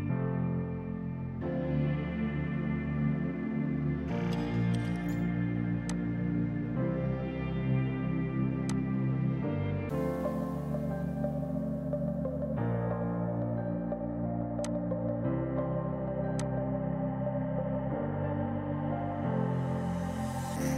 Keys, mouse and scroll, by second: 5.9 click, 8.7 click, 14.7 click, 15.9 space, 16.4 alt+click, 18.3 Delete.